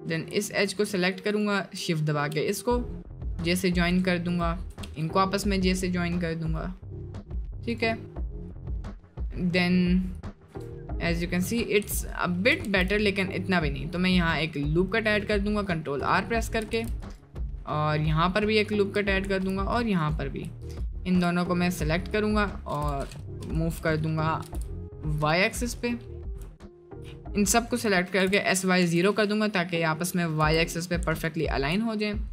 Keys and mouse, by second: 2.4 j, 3.4 click, 4.8 j, 8.7 click, 9.3-10.5 drag, 10.5 Tab, 10.7-11.2 middle drag, 12.6 ctrl+r, 16.8 ctrl+r, 17.7-18.8 middle drag, 20.8 alt+shift+click, 21.6 click, 22.7 h, 22.8 u, 23.6 ctrl+z, 24.4 g, 25.4 middle click, 26.0 middle click, 26.6 alt+shift+click, 27.6 click, 28.1 s, 29.6 middle click, 30.0 middle click, 30.4 1, 30.8 click, 31.2 shift+click, 31.9 middle click.